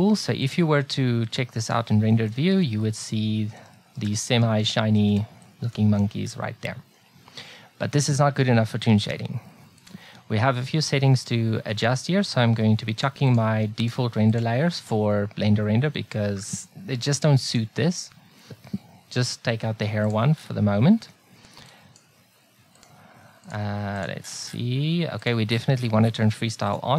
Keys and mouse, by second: 5.0 ctrl+b, 9.8-16.1 drag, 17.5 click, 20.1-26.9 drag.